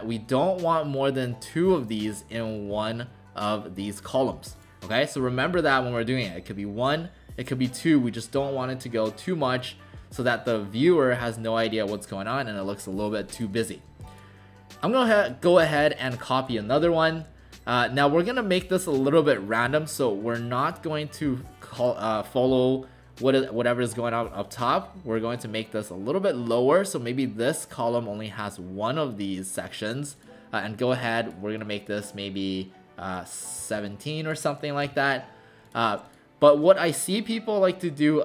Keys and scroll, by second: 33.6 1, 34.9 7.